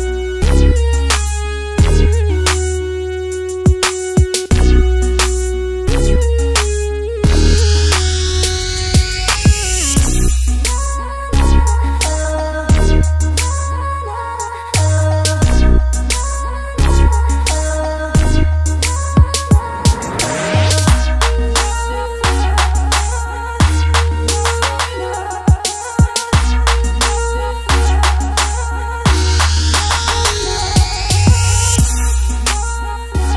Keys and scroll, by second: 31.1 f.